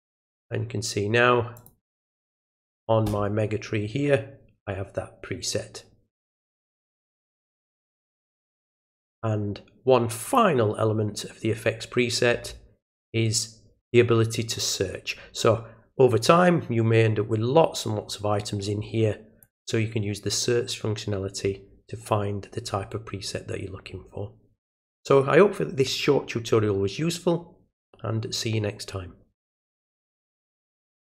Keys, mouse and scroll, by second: 0.3 click, 1.6 click, 7.7 right click, 8.3 right click, 10.2 click, 19.4 click.